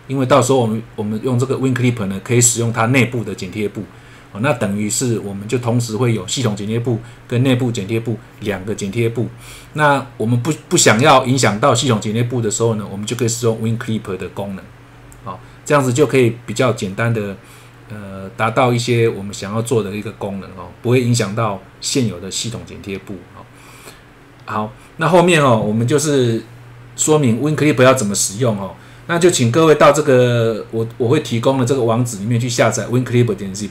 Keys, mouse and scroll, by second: 18.9 scroll down 1, 22.1 scroll down 1, 24.7 scroll down 1.